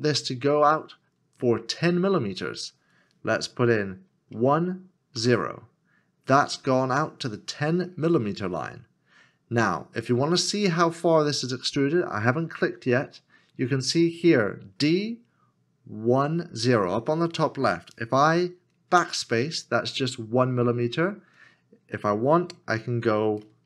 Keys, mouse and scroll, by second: 4.3 x, 4.3 KP_1, 5.2 KP_0, 18.9 KP_0, 18.9 BackSpace.